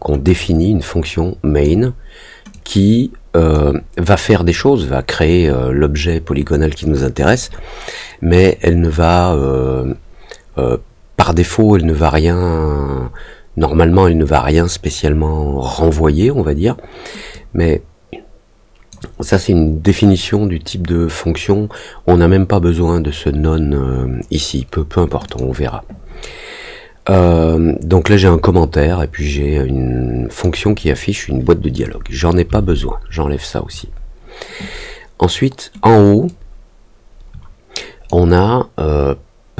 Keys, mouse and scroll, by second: 0.2-1.6 drag, 2.5-3.5 drag, 17.3-18.8 drag, 25.2 click, 28.1-30.4 drag, 36.2-38.0 drag.